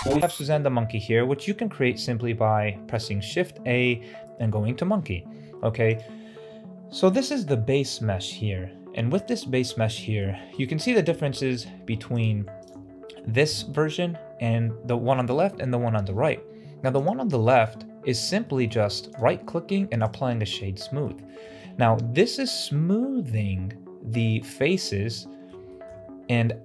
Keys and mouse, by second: 0.2 shift+a, 5.8 click, 9.9 shift+middle click, 10.5 shift+middle drag, 11.0 middle click, 12.5 shift+right click, 16.9 right drag, 17.3 shift+middle drag, 18.3 shift+middle drag, 19.0 click, 20.5-20.9 middle drag, 21.1 shift+middle drag, 25.0-25.4 middle drag, 25.6 shift+middle drag.